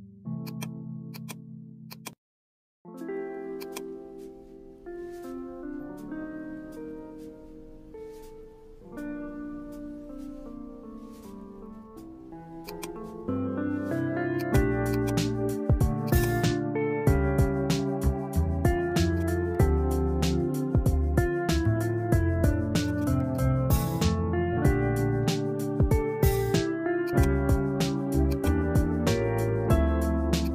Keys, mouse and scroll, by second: 1.2-7.3 drag, 11.7-14.1 drag, 19.1 click, 23.3-25.6 drag, 28.4-30.5 drag.